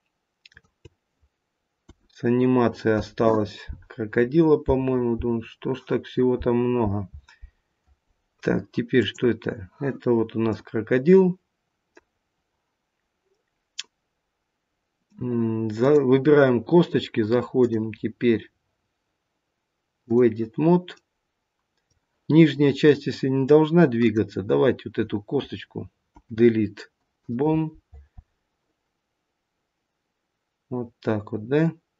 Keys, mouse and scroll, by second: 0.5 shift+click, 1.8 Delete, 8.9 click, 10.5 middle click, 10.9 middle click, 11.1 middle click, 12.1 scroll down 1, 13.3 middle click, 15.7 click, 17.6 click, 21.0 middle click, 22.8 middle click, 24.0 click, 26.1 Delete.